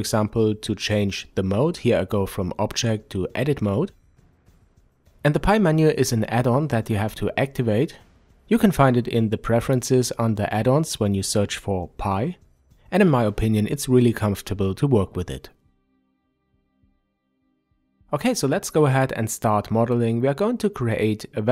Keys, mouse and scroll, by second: 4.1-21.5 drag.